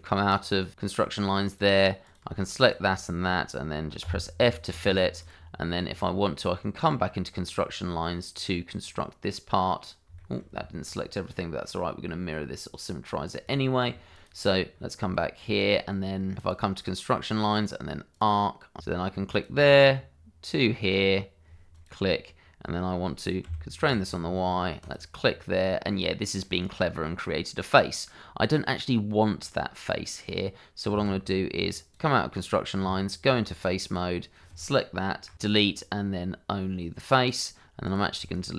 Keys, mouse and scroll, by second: 1.4 click, 2.6 shift+click, 4.0 f, 5.2 click, 6.0-6.3 scroll up 1, 6.3 middle click, 8.8 middle click, 10.2 shift+middle click, 11.3 middle click, 11.8 scroll down 1, 12.0 middle click, 14.1 click, 14.7 scroll up 1, 15.1 shift+middle click, 16.8 click, 18.8 Escape, 19.3 click, 21.7 click, 23.4 y, 24.8 click, 25.6 middle click, 30.9 Tab, 31.9 click, 32.8 Tab, 33.8 click, 35.3 Delete, 37.2 click, 38.3 shift+click.